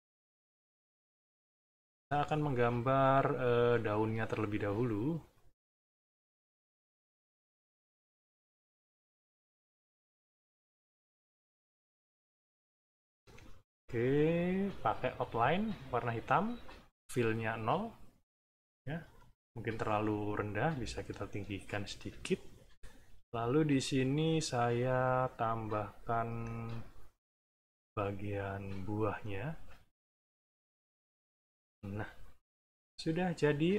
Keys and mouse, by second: 1.5 shift+click, 3.2 click, 4.5 shift+click, 5.4-7.2 drag, 7.5 click, 9.2-10.4 drag, 10.6 shift+click, 12.5 click, 13.4 right click, 15.1 shift+click, 16.6 click, 17.8 middle click, 18.9 click, 19.6 click, 20.6-22.1 ctrl+drag, 22.3 ctrl+click, 23.1 b, 24.1 click, 25.0-26.8 drag, 27.3 click, 28.5 click, 29.8-31.1 drag, 32.2 middle click.